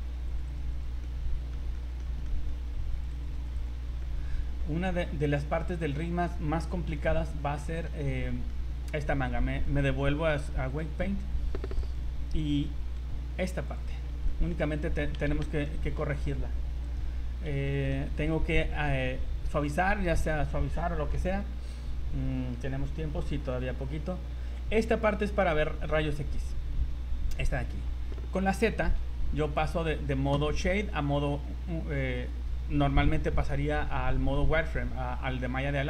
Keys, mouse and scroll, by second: 0.0 scroll up 1, 0.2 click, 0.5 click, 0.7 click, 1.0 middle click, 1.7 shift+middle click, 2.2 shift+middle click, 2.9 click, 3.1 click, 3.4 click, 3.5 click, 4.0 middle click, 4.8-5.2 scroll down 6, 5.4 middle click, 5.9 shift+middle click, 6.9 KP_1, 8.2 shift+middle click, 9.6 click, 11.8 right click, 12.3-12.7 scroll down 2, 12.8 r, 13.9 scroll up 5, 15.6 shift+middle click, 16.9 right click, 17.7 shift+middle click, 18.0 z, 25.4 scroll up 2, 28.9 z, 30.7 z, 31.2-31.6 scroll down 3.